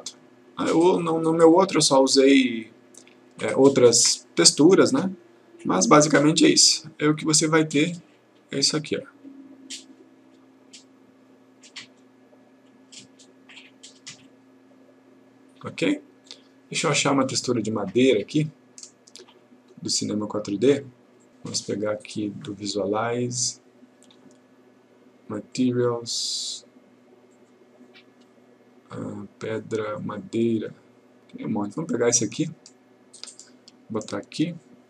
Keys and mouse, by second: 7.0 click, 16.4 click, 17.9 click, 20.9-22.8 click, 25.5 click, 27.4-28.3 click, 30.1 click, 33.4-34.7 click.